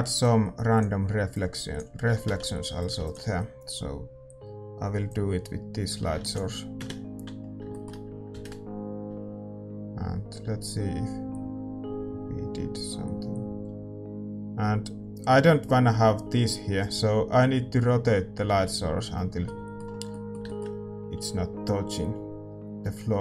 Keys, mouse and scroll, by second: 0.2-6.9 drag, 6.8 ctrl+s, 6.8 KP_0, 7.6-23.2 middle drag, 19.1 shift+z.